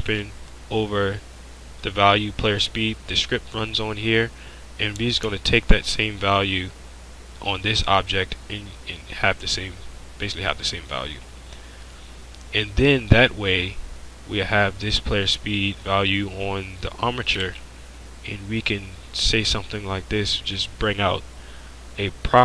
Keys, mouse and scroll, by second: 0.0 ctrl+Down, 6.5-8.6 drag, 11.8-14.0 drag, 17.4 shift+a.